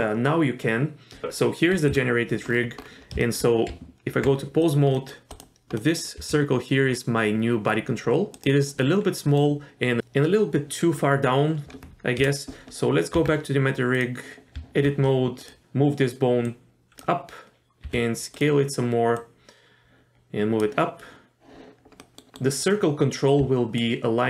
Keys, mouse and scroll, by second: 1.2 middle click, 1.9 KP_Divide, 2.5-3.2 scroll up 4, 3.2 shift+middle drag, 3.7 Tab, 4.6 click, 4.9 middle click, 5.3 click, 5.8 middle drag, 6.2 g, 8.8 middle click, 12.2 KP_Divide, 13.1 Tab, 13.9 click, 14.5 Tab, 15.4 click, 15.6 g, 16.4 click, 17.8 s, 19.2-20.6 drag, 22.0 middle click, 22.3 middle click, 23.4 d, 23.8-24.2 drag.